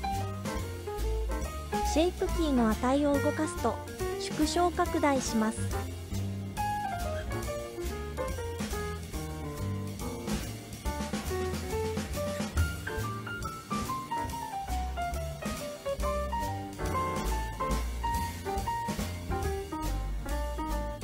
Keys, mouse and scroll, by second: 3.6-5.6 super+drag, 6.6-8.8 super+drag, 9.9 super+click, 15.5 click, 17.0-20.1 drag.